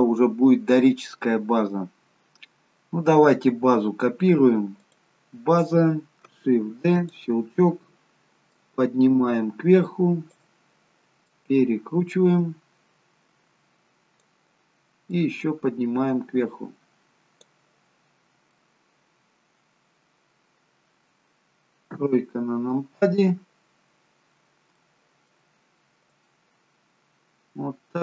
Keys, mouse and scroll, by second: 4.7 click, 6.7 shift+d, 8.4 click, 11.3 click, 15.1 click, 18.5 middle click, 21.8 KP_3, 23.6-24.5 scroll up 1, 24.5 scroll up 2, 24.7 shift+middle click, 26.1 click.